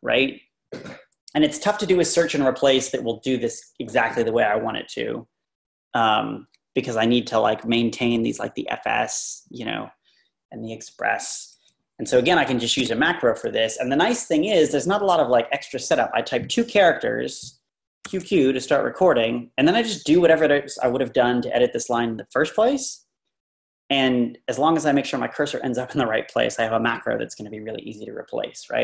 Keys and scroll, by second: 12.0 Left, 12.8 ⟲, 18.1 typing.